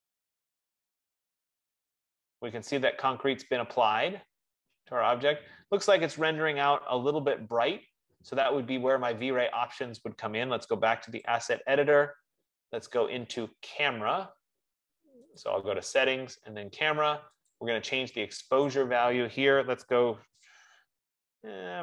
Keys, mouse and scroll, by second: 10.8 click, 12.8 click, 15.6 click, 18.6 click, 19.6 click.